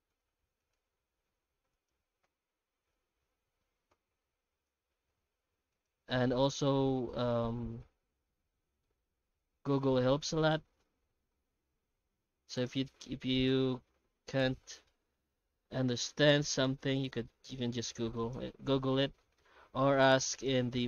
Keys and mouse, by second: 0.1 alt+s, 0.8 s, 2.2 ., 3.9 ., 4.9 s, 9.2 middle click, 9.8 1, 10.8 2, 11.5 ctrl+x, 11.9 ctrl+r, 13.5 middle click, 13.9 2, 14.4 middle click, 14.9-15.9 middle drag, 16.8 c, 18.6 w, 19.2 middle click, 19.5 2, 20.0 alt+a, 20.3 alt+shift+right click.